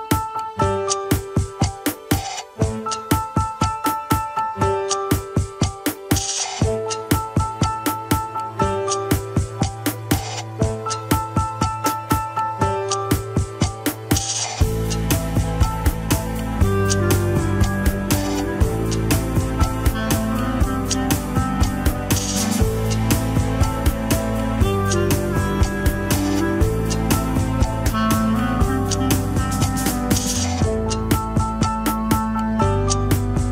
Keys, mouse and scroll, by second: 0.2 s, 3.9 Tab, 4.2 click, 4.4 Tab, 4.6 s, 5.4 Tab, 5.7 click, 6.1 Tab, 6.3 s, 7.5 Tab, 7.9 scroll up 3, 8.4 alt+z, 8.7 click, 9.0 alt+z, 12.1 Tab, 12.8 click, 13.1 scroll up 3, 13.3 alt+z, 13.6 s, 14.2 alt+z, 14.9 click, 15.1 shift+middle click, 15.5 Tab, 15.9 shift+drag, 16.3 Tab, 16.6 alt+z, 16.9 s, 18.1-18.8 drag, 18.8 alt+z, 19.0 s, 20.5 Tab, 20.7 click, 21.5 Tab, 21.8 s, 22.8 KP_3, 23.1 alt+z, 23.4 scroll up 1, 24.1 click, 24.7 Tab, 25.1 click, 25.6 shift+click, 25.9 alt+z, 26.2 Tab, 26.5 s, 27.4 KP_1, 27.6-28.0 scroll down 4, 27.7 alt+z, 28.2 alt+z, 28.5 shift+middle click, 28.9 Tab, 29.1 scroll down 5, 29.1 KP_3, 29.4 alt+z, 29.7-30.1 scroll up 2, 30.3-30.7 shift+middle drag, 30.7-31.1 scroll up 1, 31.1 click, 31.4 scroll down 1, 31.7 alt+z, 32.1 alt+z, 32.5 shift+click.